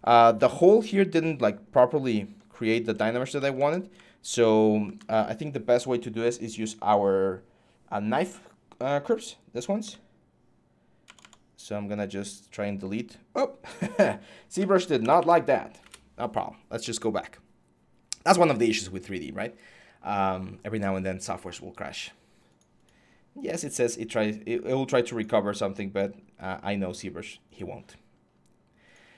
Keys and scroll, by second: 2.6 ctrl+z, 14.6-16.3 typing.